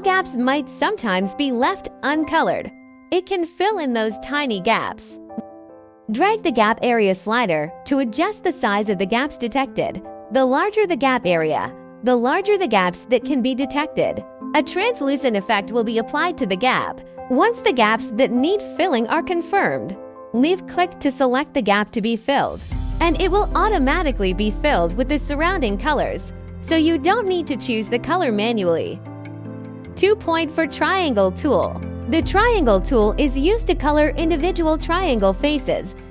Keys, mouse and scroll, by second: 3.8 scroll, 7.4 click, 21.0 click, 25.5 scroll, 27.4 scroll.